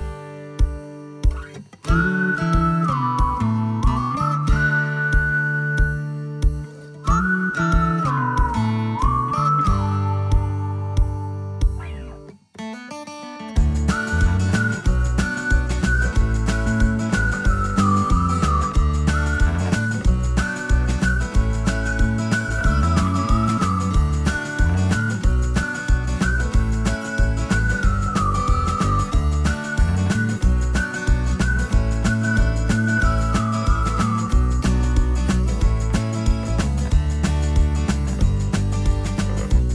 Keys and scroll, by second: 10.9 space, 32.6 ctrl+z, 38.7 alt+q.